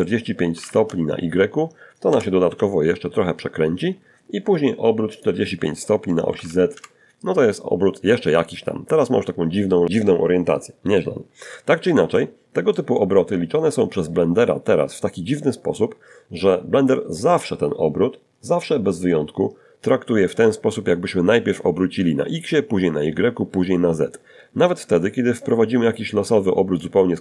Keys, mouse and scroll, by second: 0.7 1, 3.3 click, 4.5 4, 4.9 Return, 4.9 5, 9.9 scroll up 2, 10.3 shift+middle click, 11.3 shift+middle click, 23.6-25.2 drag, 25.9 click.